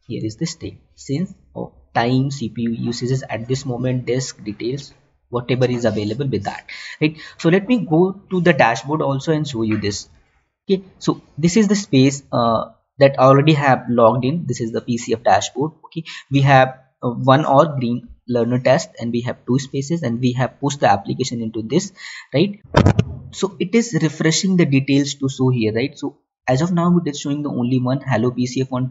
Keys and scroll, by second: 10.3 alt+Tab.